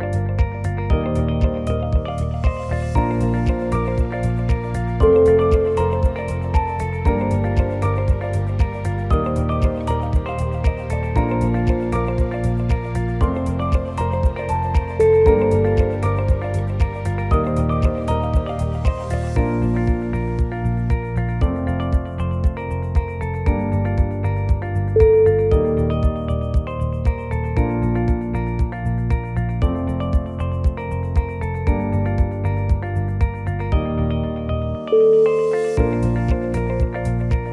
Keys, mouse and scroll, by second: 0.3 click, 0.6 g, 2.4 shift+click, 2.8 e, 4.1 s, 8.8 click, 9.0 g, 10.6 shift+click, 11.0 e, 12.3 s, 13.7 click, 14.2 g, 15.8 click, 16.2 g, 17.2 shift+click, 17.6 e, 18.8 s, 25.4 shift+middle click, 26.0-26.3 scroll up 1, 26.3 s, 29.0 click, 29.4 g, 31.6 ctrl+r, 34.3 click, 34.7 g.